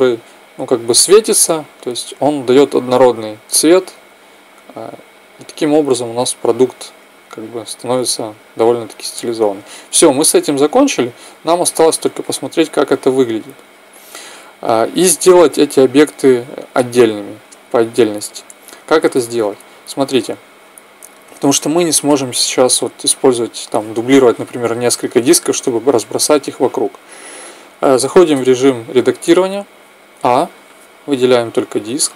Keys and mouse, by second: 8.1-9.8 drag, 11.2-13.8 middle drag, 17.8-19.6 middle drag, 19.6-21.4 right drag, 28.1 Tab, 29.7 a, 31.4 l.